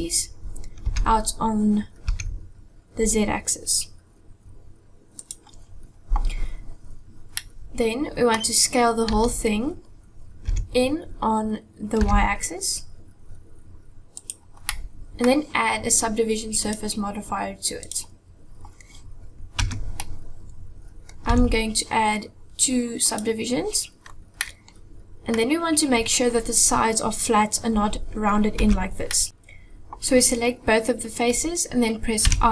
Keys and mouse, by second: 7.2-8.4 middle drag, 9.1 a, 10.3 s, 14.7 middle click, 16.6-17.9 drag, 19.6 Tab, 20.0-21.1 middle drag, 21.3 z, 23.0 click, 24.4 middle click, 28.6 Tab, 29.1 middle click, 29.3 ctrl+z, 32.1 i.